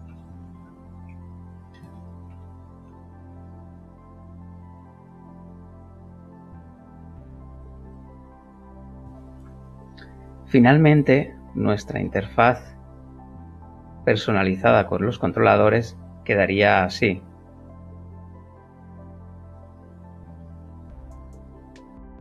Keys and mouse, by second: 0.1-2.3 typing, 3.3 shift+l, 15.7 ctrl+super+click, 16.8 g, 19.5 click, 20.4 click, 21.6 click.